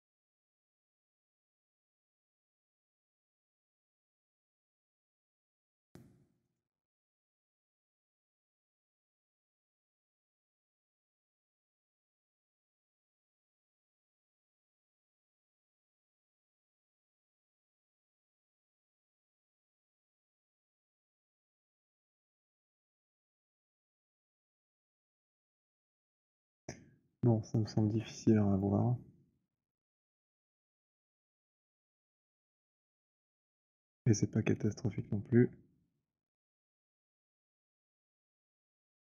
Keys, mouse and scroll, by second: 0.2 click, 0.9 click, 1.1 click, 2.4 click, 3.3 click, 3.9 click, 4.4 click, 5.2 click, 6.5 click, 8.4 click, 9.6 click, 10.5 click, 11.4 click, 12.1 click, 13.0 click, 13.8 click, 14.8 click, 15.7 click, 16.7 click, 17.7 click, 18.7 click, 21.6 click, 22.5 click, 23.8 click, 25.6 click, 26.7 scroll, 27.2 alt+click, 27.9 w, 28.6 click, 29.9 alt+click, 30.1 alt+middle click, 31.5 alt+click, 31.5 w, 33.6 right click, 34.6 click, 35.2-35.6 scroll, 36.6 middle click, 37.7 middle click.